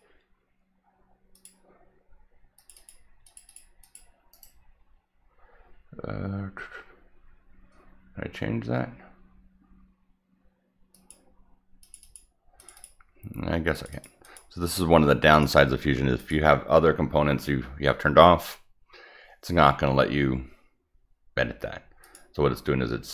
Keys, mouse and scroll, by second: 1.3 click, 2.5 click, 2.7 click, 3.2 click, 3.4 click, 3.8 click, 4.3 right click, 10.9 click, 11.8 click, 12.0 click, 12.5 click, 12.7 click, 13.7 click, 13.9 click, 14.2 click, 15.3 click, 15.8 Escape, 16.1 click, 22.0 click.